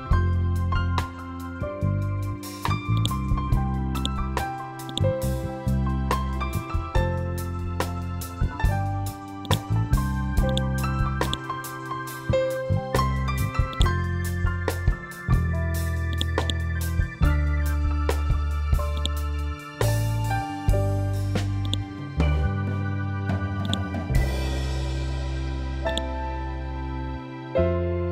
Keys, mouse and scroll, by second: 0.8 Return, 2.9-8.7 drag, 9.3 click, 9.4-13.6 drag, 14.9 ctrl+u, 16.0-21.6 drag, 21.6-28.1 drag.